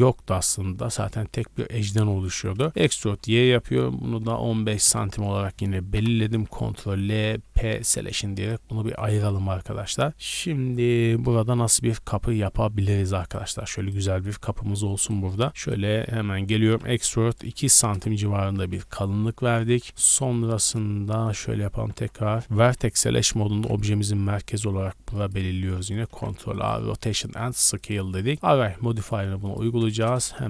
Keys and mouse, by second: 2.1 g, 2.7 e, 5.9 ctrl+l, 7.5 p, 8.1 Tab, 8.5-13.7 middle drag, 11.2 Tab, 12.6 Tab, 13.7 click, 13.9-14.9 middle drag, 14.2 Tab, 14.5 a, 14.9 click, 15.1 shift+middle click, 15.5 3, 15.6 click, 15.7 middle click, 16.5 e, 19.4 ctrl+;, 20.1-23.5 shift+middle drag, 21.5-24.3 typing, 24.0 Tab, 25.6 z, 26.1 ctrl+a.